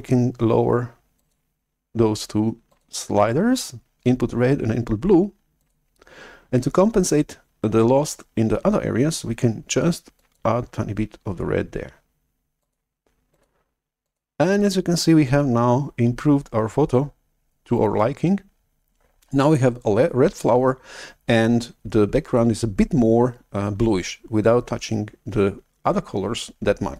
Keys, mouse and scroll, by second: 1.1-5.2 drag, 5.8-6.9 drag, 10.4 click, 12.5 click, 13.2 click, 13.9 click, 14.5 click.